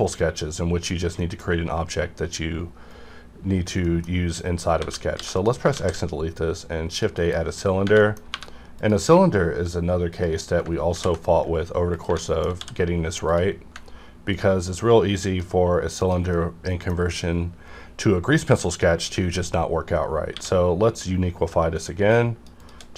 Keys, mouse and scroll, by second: 0.9 scroll down 1, 1.2 middle click, 3.7 scroll up 1, 3.8 middle click, 4.8 a, 5.1 x, 5.2 click, 5.7 shift+a, 6.9 click, 7.2 KP_Decimal, 7.6 scroll down 1, 8.0 middle click, 8.3 3, 8.8 click, 10.9 ctrl+b, 11.9 click, 12.1 Tab, 12.3 middle click, 12.6 d, 13.3 click, 13.3 click, 14.3-16.0 ctrl+drag, 16.3-19.1 middle drag, 20.4 q, 22.1 shift+click.